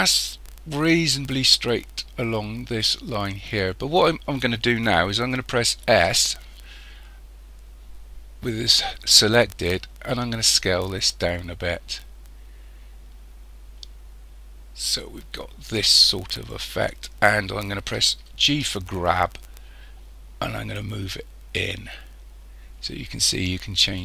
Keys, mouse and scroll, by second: 0.8-1.4 scroll down 3, 1.4-3.6 scroll down 1, 3.6-5.5 scroll down 3, 5.9 s, 18.5 g.